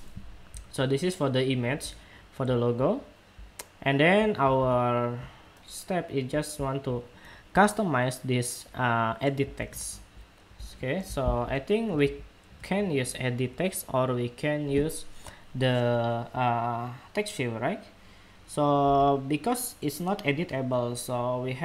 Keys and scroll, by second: 4.3 super+Tab, 9.2 super+Tab.